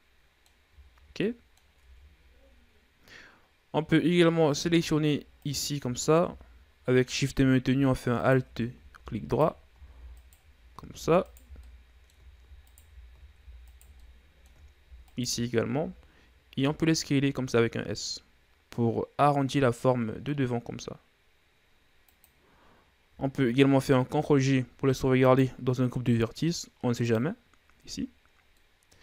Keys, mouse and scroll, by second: 1.4-1.8 shift+scroll down 2, 1.8 middle click, 2.3 Tab, 5.9 alt+right click, 8.7 alt+shift+right click, 9.8 alt+shift+right click, 10.7 alt+shift+right click, 11.7 alt+shift+right click, 12.2-13.2 middle drag, 13.2 alt+shift+right click, 14.2 alt+shift+right click, 14.5-15.6 middle drag, 15.6 alt+shift+right click, 16.5-16.8 scroll down 1, 17.2 s, 24.6 ctrl+g, 27.5-29.0 drag.